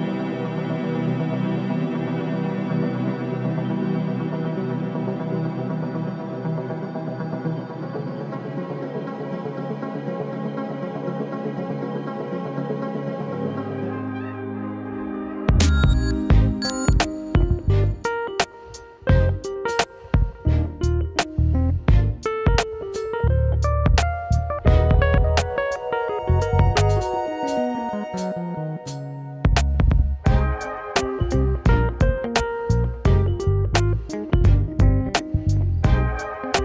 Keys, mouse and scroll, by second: 0.0-0.5 scroll down 5, 0.5-1.3 middle drag, 1.3-1.7 scroll down 2, 1.7-4.1 middle drag, 4.8 l, 5.3 l, 6.6 shift+d, 12.1 click, 13.2 click, 17.1 click, 18.3 scroll up 1, 19.5 click, 21.3 middle click, 21.6-22.3 scroll down 5, 22.3 middle click, 24.6 shift+d, 29.5 click, 30.3 middle click, 30.9-31.5 scroll down 5, 31.5-32.5 middle drag, 32.5-32.9 scroll down 3, 32.9-34.4 middle drag, 34.4-34.8 scroll up 1, 34.8-35.4 middle drag, 35.4-35.7 scroll up 1, 35.7-36.6 middle drag.